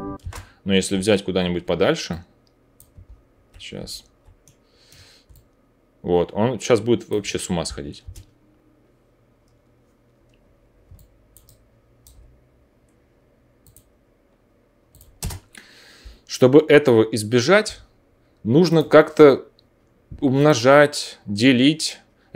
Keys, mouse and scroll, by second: 0.1 space, 0.8 alt+middle click, 8.0 space, 10.9 alt+middle click, 12.1-13.7 middle drag, 13.7-14.8 drag, 14.8 middle click, 15.1-18.6 drag, 15.1 space, 18.6-22.3 middle drag.